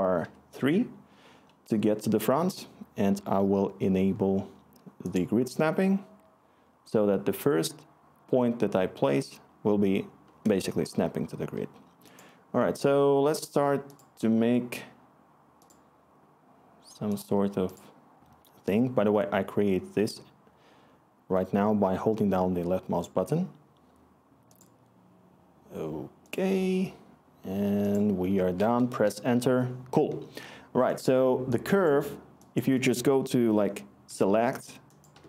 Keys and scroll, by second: 0.2 3, 28.9 Return, 34.0 s, 35.1-35.2 typing.